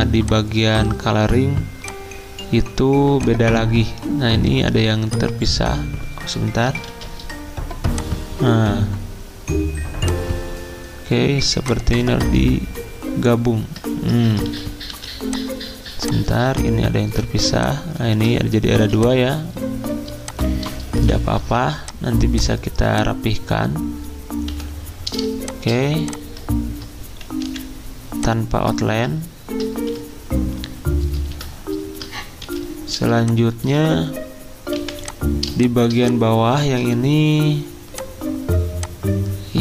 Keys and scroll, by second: 6.9 ctrl+z, 14.5 ctrl+z, 17.1 v, 18.1 ctrl+z, 18.7 z, 20.1 v, 24.5 Delete, 27.3 Escape, 29.8 ctrl+z, 31.3 x, 32.4 /, 34.7 v, 36.6 ctrl+z.